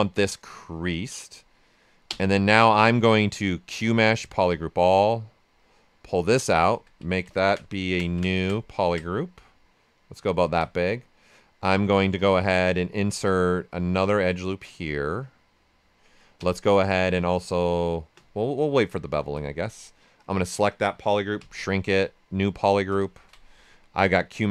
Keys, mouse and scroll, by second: 0.8 click, 2.0 typing, 4.6 right click, 5.5-10.2 drag, 10.2 ctrl+right click, 12.1 space, 13.7-16.3 drag, 16.3 space, 19.2 space, 20.1 ctrl+shift+click, 21.3 ctrl+shift+s, 22.0 ctrl+w, 23.0 ctrl+shift+click.